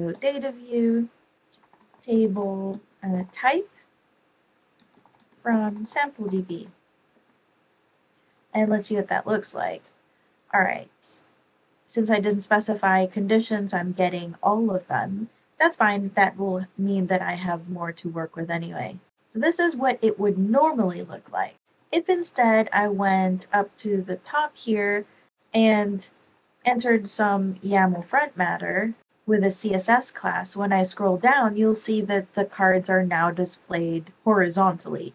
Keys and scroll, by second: 0.1 Return, 1.4-3.5 typing, 4.5-7.0 typing, 7.1 Right, 8.4 Up, 8.6 Up, 21.6 shift+super+Home, 21.6 super+c, 24.7 Return, 25.4 Return, 25.6 Page_Up, 25.8 Up, 26.6-28.3 typing, 28.7 Up, 29.0 super+v, 29.0 Down.